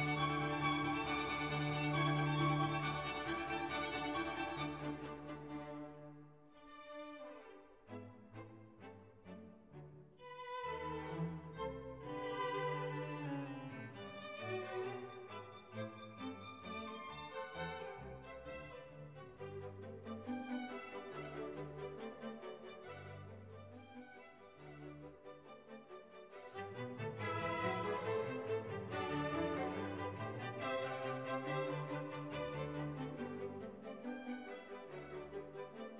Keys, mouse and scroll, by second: 0.5-4.4 typing, 10.1 click, 10.8 5, 11.2 0, 11.4 Return, 13.4 click, 14.9-17.7 drag, 18.5-20.0 drag, 22.0 click, 25.2 click, 30.0 click, 32.5 click.